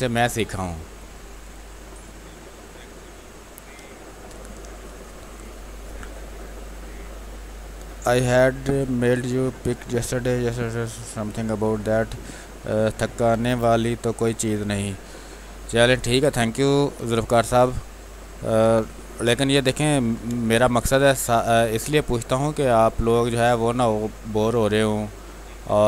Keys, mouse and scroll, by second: 0.2 click, 0.9 space, 1.1 click, 1.4 space, 2.4 click, 2.7 space, 15.6 space, 16.0 alt+click, 18.7 r, 19.3 click, 19.9 b, 20.2 space, 20.5 ctrl+click, 21.0 click, 22.2-24.6 drag, 24.6-25.8 drag.